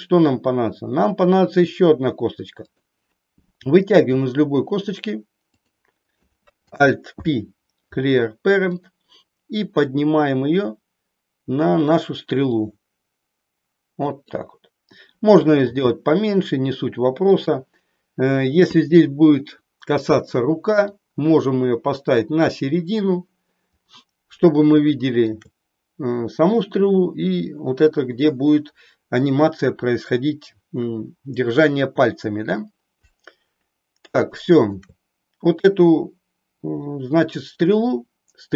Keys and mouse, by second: 2.6 click, 4.0 e, 5.5 click, 6.0 click, 7.0 alt+p, 9.5-12.0 drag, 12.4-14.3 drag, 15.6 s, 17.4 click, 20.9-22.4 drag, 25.0 shift+middle click, 34.3 shift+middle click.